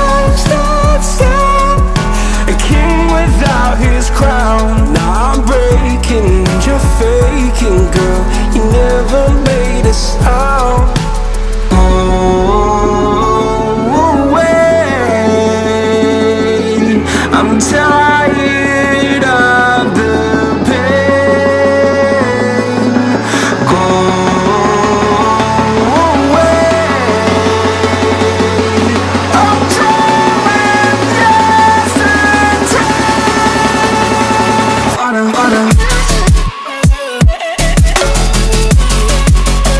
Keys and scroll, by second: 10.8 ctrl+a, 15.8 ctrl+a, 30.3 ctrl+g.